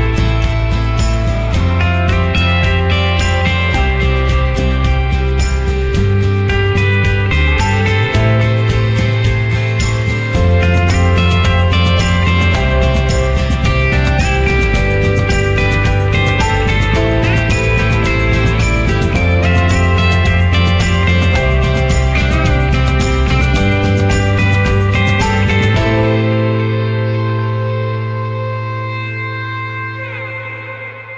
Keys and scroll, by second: 1.5 ctrl+t, 13.6 ctrl+0, 15.5 ctrl+0.